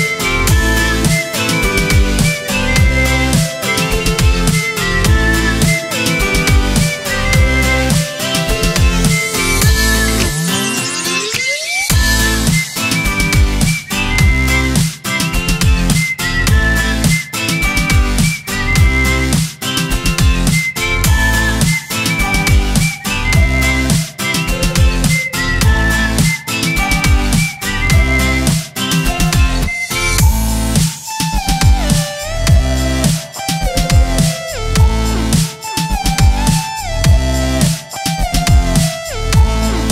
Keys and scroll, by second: 5.6-7.2 typing, 8.2 z, 8.4 space, 9.1 v, 10.2 z, 10.3 space, 10.8 i, 12.7 i, 16.3 0, 16.3 ., 16.5 2, 18.4 v, 19.8 space, 20.5 v, 22.8 BackSpace, 23.6 shift+b, 24.0 l, 24.2 s, 24.6 Left, 25.4 space, 25.9 BackSpace, 26.3 ctrl+Return, 27.0 space, 29.1 ctrl+z, 31.0 ctrl+a, 31.3 shift+j, 31.6 o, 31.6 y, 32.0 ctrl+Return, 33.4 shift+f, 33.8 ctrl+a, 34.1 shift+f, 35.0 ctrl+Return, 35.6 z, 35.8 space, 36.3 space, 37.4 v, 38.7-39.9 typing.